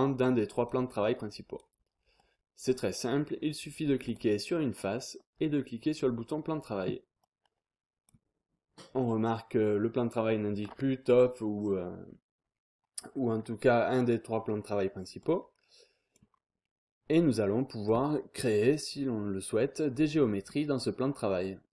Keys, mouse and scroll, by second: 1.8-2.2 scroll up 1, 2.2 click, 2.5-3.5 scroll up 1, 4.0 click, 4.5-5.1 scroll down 1, 6.1 click, 7.2 click, 15.2 click, 16.3 scroll down 1, 16.5-17.1 scroll up 1, 17.1 click, 20.4 scroll down 1, 20.6-21.3 scroll up 1.